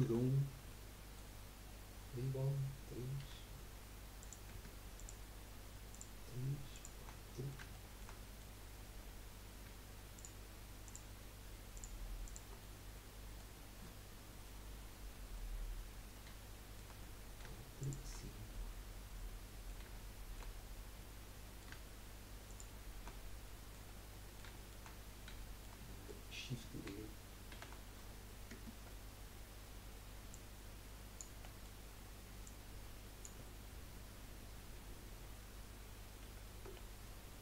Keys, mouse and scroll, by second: 0.0 Tab, 0.7 middle click, 1.6-3.2 scroll up 1, 3.2 3, 4.2 click, 4.9 shift+click, 5.9 shift+click, 6.7 shift+click, 7.2-10.1 middle drag, 10.1 shift+click, 10.8 shift+click, 11.7 shift+click, 12.2 shift+click, 12.6 middle click, 13.5-14.0 scroll up 4, 14.0-15.5 middle drag, 15.5-16.1 scroll up 2, 16.4-17.8 shift+middle drag, 17.8 shift+click, 18.2-18.5 scroll down 3, 18.5-20.6 middle drag, 20.6 scroll up 2, 21.0-22.5 middle drag, 22.5 shift+click, 23.1-23.4 scroll down 5, 23.4 middle click, 23.9 scroll down 3, 24.1 middle click, 24.9-25.4 scroll up 1, 25.4-27.5 shift+middle drag, 27.5 shift+d, 30.3-31.3 drag, 31.4-32.4 middle drag, 32.4 click, 33.7-35.5 scroll up 2, 36.2 ctrl+z, 36.7-37.0 scroll down 1, 37.0 middle click.